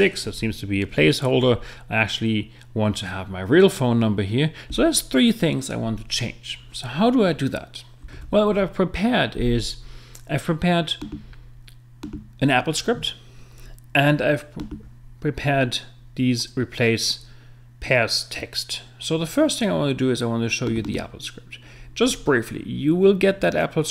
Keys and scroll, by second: 8.2 super+Tab.